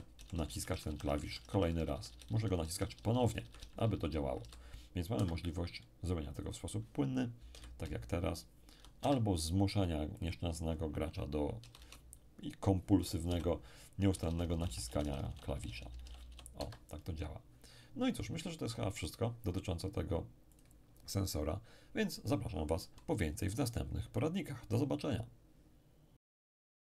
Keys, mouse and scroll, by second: 5.1 Escape, 6.3 click, 7.5 p, 7.8 d, 8.1 d, 9.0 Escape, 10.2 click, 11.6 d, 11.7 d, 13.3 p, 14.1 d, 14.2 d, 14.4 d, 16.5 Escape, 20.5 click.